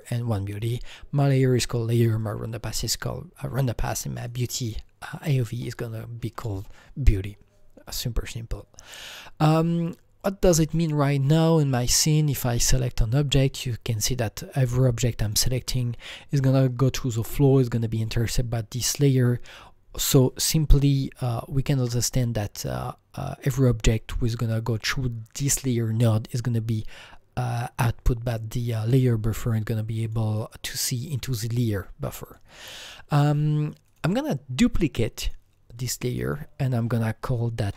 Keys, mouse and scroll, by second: 0.0 click, 1.2 click, 2.2 click, 4.3 click, 12.6-15.0 click, 15.3 click, 15.8 click, 17.5 click, 21.0 alt+Num_Lock, 21.0 click, 21.3 alt+middle click, 21.3 click, 21.3-21.8 scroll, 30.0 alt+middle click, 30.0 alt+scroll, 30.0 click, 32.2 click, 32.6 click, 34.1 click, 35.4 click, 36.2 double click, 37.4-37.7 typing.